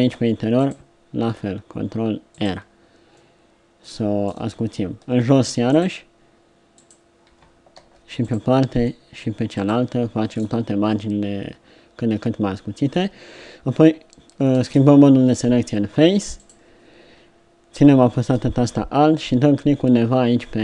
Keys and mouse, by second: 0.2 ctrl+r, 5.3 ctrl+r, 7.7 ctrl+r, 12.7-14.5 middle drag, 14.5 ctrl+Tab.